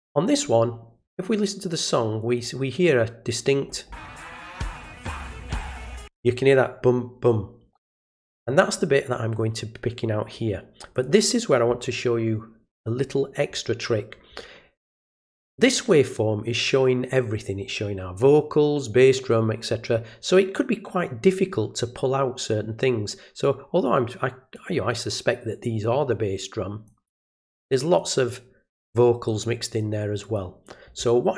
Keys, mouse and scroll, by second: 1.7 click, 10.9 click, 15.5 click, 23.4 click, 24.5 click, 25.5 click, 26.8 click, 28.0 click, 30.2 click.